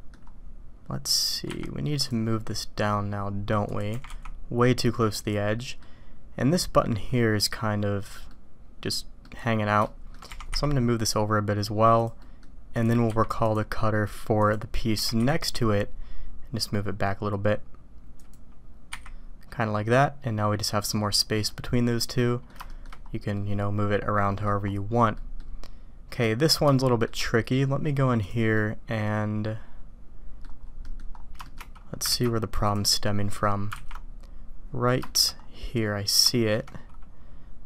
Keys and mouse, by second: 3.9 g, 5.6 click, 8.3 click, 9.2 click, 9.8 shift+drag, 12.2 click, 12.7 click, 13.1 q, 14.9 g, 19.8 click, 19.9 middle click, 21.5-22.5 drag, 22.6 shift+click, 23.3-24.4 middle drag, 25.1 middle click, 26.7-27.0 shift+drag, 28.2-30.4 drag, 30.8 click, 31.4 shift+click, 35.0 shift+middle drag, 36.2 shift+middle click.